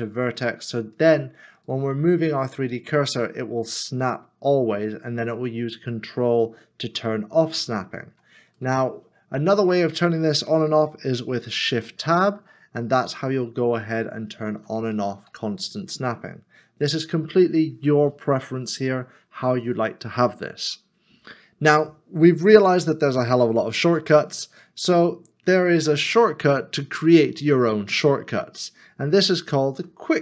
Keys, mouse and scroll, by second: 1.7 shift+right click, 11.4 s, 11.6 shift+Tab, 12.8 shift+Tab, 13.8 shift+Tab, 14.5 shift+Tab, 15.2 shift+Tab, 15.8 shift+Tab, 18.5 shift+Tab, 18.6 scroll down 1, 19.4 scroll up 1, 29.8 q.